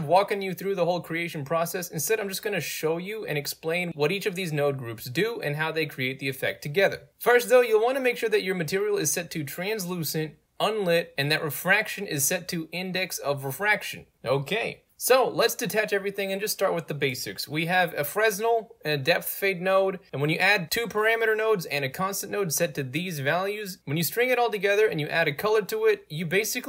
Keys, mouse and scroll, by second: 0.3 click, 1.0-2.0 right drag, 2.5-3.4 right drag, 3.8 middle click, 3.9 scroll up 2, 4.1-4.5 right drag, 4.9 right click, 5.7-6.1 right drag, 6.6 right click, 7.1-7.4 right drag, 7.6 right click, 8.6 click, 11.8 click, 11.9-13.1 typing, 13.2 click, 14.0 right click, 14.3 click, 15.2 click, 15.9 click, 16.6 click, 17.1 click, 18.2 click, 19.3 click, 20.1 ctrl+click, 20.8 click, 24.5 ctrl+click, 24.9-26.1 alt+drag, 26.4 click.